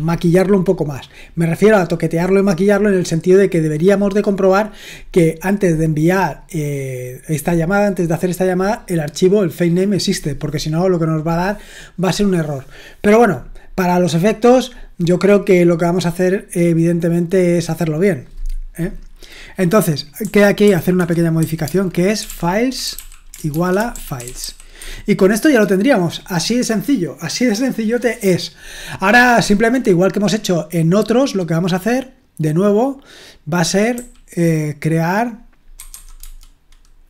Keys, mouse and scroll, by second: 19.9-23.4 typing.